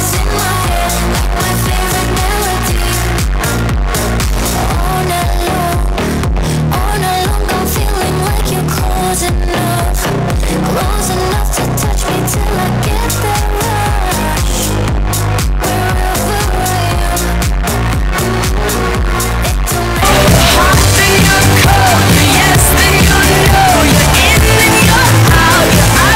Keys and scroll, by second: 2.9 a, 3.6-6.4 Down, 7.1 Down, 7.2 Down.